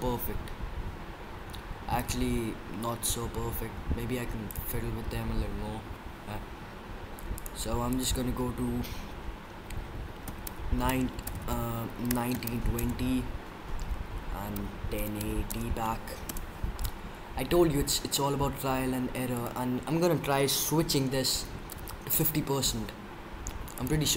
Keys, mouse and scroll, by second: 0.0 Escape, 1.9 drag, 3.6 Escape, 3.6 drag, 4.4-6.0 drag, 7.8-9.6 drag, 11.3 BackSpace, 19.3-21.1 drag, 23.7-24.1 drag.